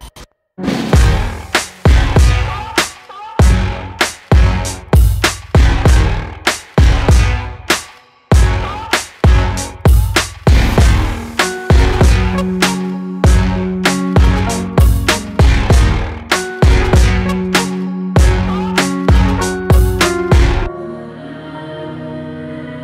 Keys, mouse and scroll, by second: 6.2 click, 7.3 click, 8.1 ctrl+click, 9.2 e, 13.3 ctrl+r, 15.8 click, 16.9 click, 17.6 shift+click, 18.5 e.